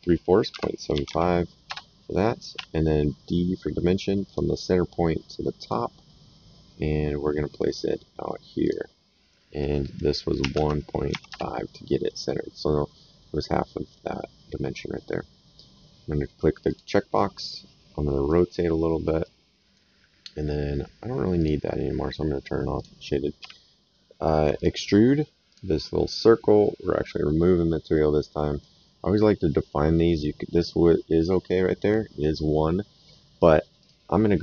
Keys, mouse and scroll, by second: 0.9 KP_7, 1.0 KP_5, 1.6 Return, 2.5 d, 4.2 click, 5.6 click, 8.6 click, 10.4 KP_1, 10.5 KP_Decimal, 11.1 KP_5, 11.3 KP_Enter, 16.7 click, 17.1 right click, 18.8 middle click, 19.2 right click, 21.4 click, 22.8 click, 23.4 s, 24.5 click, 27.0 click, 27.9 right click, 29.0 middle click, 30.1 right click, 33.8 click.